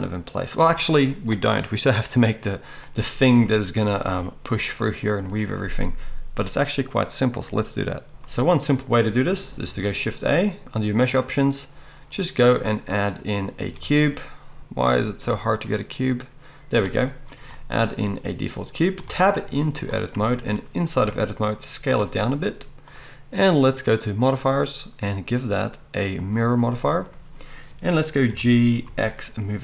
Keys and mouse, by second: 8.1-22.0 drag, 9.7 shift+a, 13.6 shift+a, 19.0 Tab, 19.4 z, 20.9 s, 22.0-24.3 middle drag, 24.3-29.6 drag, 28.3 g.